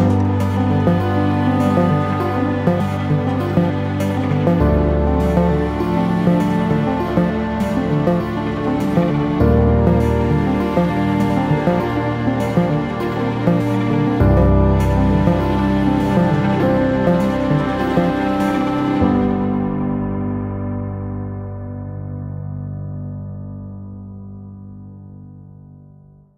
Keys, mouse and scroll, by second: 0.1 click, 1.3-4.9 middle drag, 4.9 click, 5.9 ctrl+r, 7.0 middle click, 7.4 click, 7.7 ctrl+r, 8.7 middle click, 9.0 click, 9.2-10.4 middle drag, 9.6 ctrl+r, 10.4 ctrl+z, 10.5 click, 10.8 ctrl+r, 11.9 middle click, 12.3 click, 13.0 ctrl+r, 14.2 click, 14.3 shift+middle click, 14.9 click, 15.2 ctrl+r, 16.1 middle click, 16.5 click, 16.8 ctrl+r, 17.4 click, 17.6 KP_0, 18.5 click, 18.9 z, 20.2 click, 20.7 3, 20.9 click, 21.0 click, 21.5 Delete, 22.2 alt+click, 22.4 alt+click, 22.6 2, 22.8 alt+click, 23.9 e, 26.0 click.